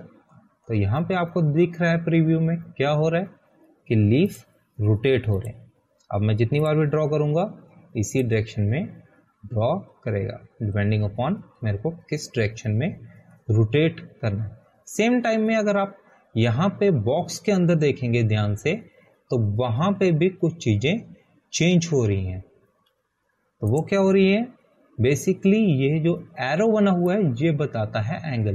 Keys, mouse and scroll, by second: 6.8 click, 10.9 scroll down 1, 21.1 scroll down 1, 26.2 click.